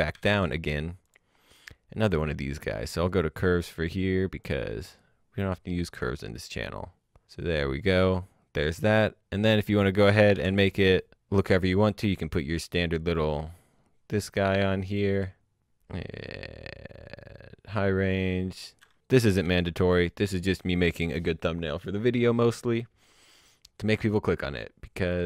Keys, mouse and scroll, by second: 0.1 alt+s, 1.0 click, 5.0 click, 6.2-7.0 scroll down 1, 9.7 alt+Num_Lock, 9.8 s, 11.4 click, 19.4 alt+s, 24.5 click.